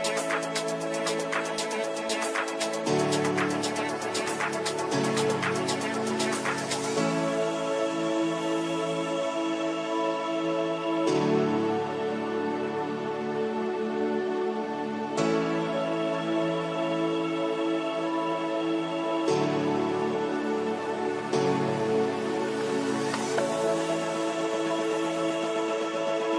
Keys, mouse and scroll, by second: 0.8 alt+click, 2.7-4.1 ctrl+right drag, 4.1 click, 4.5 shift+F2, 5.1 p, 7.4-17.8 drag, 17.8 right click, 18.8 click, 21.0 click, 23.1-26.3 ctrl+drag.